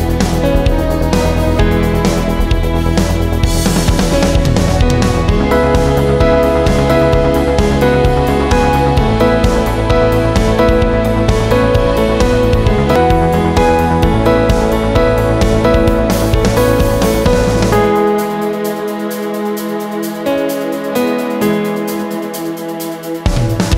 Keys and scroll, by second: 12.6-13.0 [, 14.0 [, 14.3 [, 14.5 [, 14.6 [.